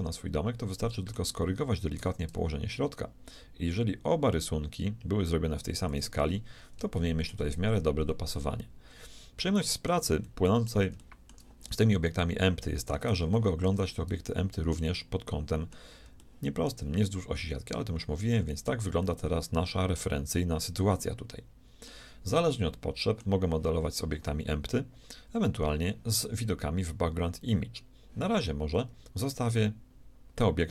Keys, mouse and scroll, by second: 2.0 g, 6.2-9.9 middle drag, 10.2-13.9 middle drag, 17.2-18.8 shift+middle drag, 19.0-20.8 middle drag, 22.3-25.2 middle drag.